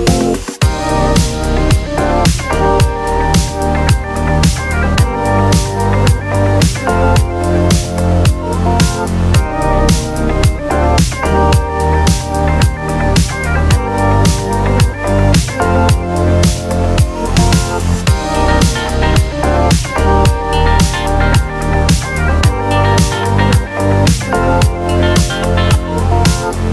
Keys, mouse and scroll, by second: 0.2 shift+Num_Lock, 0.2 click, 1.9 shift+y, 2.2 shift+r, 2.7 click, 4.1-6.2 typing, 4.5 click, 5.0 click, 5.1 Right, 6.1-11.0 drag, 11.2-12.3 typing, 12.4 click, 13.0 scroll down 1, 13.7 scroll up 1, 14.9 click, 15.5 scroll down 1, 16.0-16.7 click, 16.7 right click, 17.0 click, 17.9-18.7 typing, 18.4 click, 18.8 ctrl+v, 19.2 click, 19.6 alt+scroll down 1, 20.4 click, 20.4-21.5 drag, 21.9 alt+scroll up 1, 22.3-23.0 click, 23.0 t, 23.2 click, 23.5 Delete, 23.6 Return, 23.9 Right, 24.5 click, 24.6 BackSpace, 24.7 Return, 25.1-26.0 click, 26.2-26.5 scroll down 1, 26.5 click.